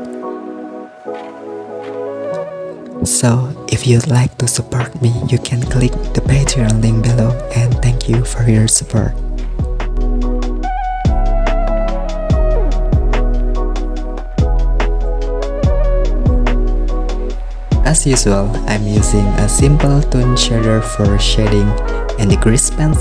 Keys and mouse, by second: 0.6 Tab, 0.8 middle click, 1.3 super+s, 1.9 right click, 2.6 middle click, 2.9 Tab, 3.0 a, 3.1 middle click, 3.5 e, 5.3 middle click, 5.9 click, 6.3 super+s, 6.5 middle click, 7.0 super+s, 7.1 click, 7.9 Tab, 8.3 super+s, 8.4 click, 9.2 click, 9.2 right click, 10.0 Tab, 10.5 click, 10.9 click, 11.2 click, 11.5 middle click, 12.2 middle click, 12.4 super+s, 12.6 middle click, 12.9 i, 14.7 middle click, 15.1 click, 15.3 middle click, 16.9 middle click, 17.6 click, 18.1 shift+middle click, 18.5 shift+middle click, 18.7 super+r.